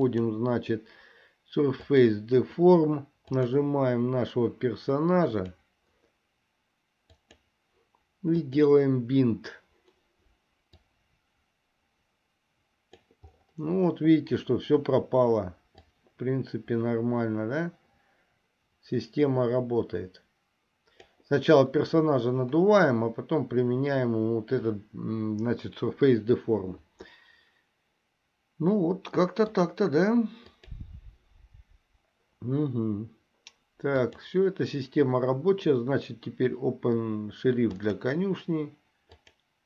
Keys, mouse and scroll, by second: 0.2-2.3 drag, 3.4 click, 8.5 click, 11.0-13.2 drag, 16.1-21.3 drag, 29.4 middle click, 30.8 click, 34.2-39.6 drag.